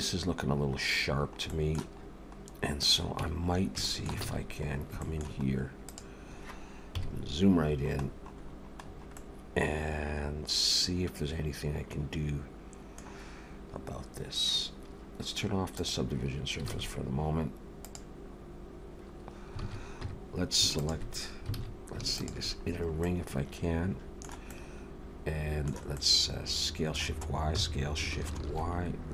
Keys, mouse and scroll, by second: 0.7-1.5 scroll down 7, 1.5 middle click, 2.0-3.1 scroll up 6, 2.8 click, 3.2 Tab, 3.4-3.8 scroll up 3, 3.8 shift+middle click, 4.2 alt+a, 4.3-4.9 scroll up 5, 5.0 shift+middle click, 5.8 click, 7.0 KP_Decimal, 7.6-8.0 scroll down 5, 8.4-10.0 scroll down 10, 9.1 middle click, 15.8 click, 16.7 alt+a, 17.8 click, 19.6 alt+a, 20.0 3, 20.8 alt+shift+click, 21.6 alt+a, 22.2 alt+shift+click, 22.7-23.2 scroll down 3, 23.0 middle click, 27.5 s.